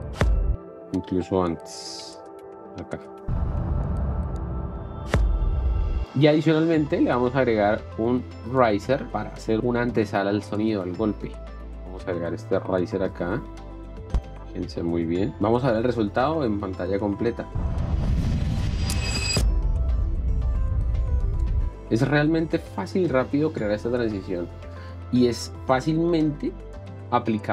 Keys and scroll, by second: 2.2 ,, 3.2 space, 17.5 space.